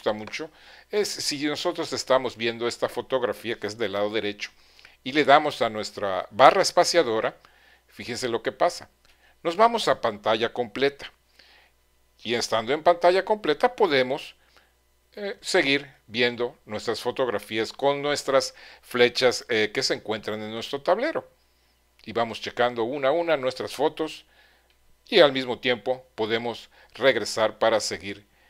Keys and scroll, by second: 8.9 space, 15.6 Right, 20.5 Right, 21.6 Right, 25.6 Left.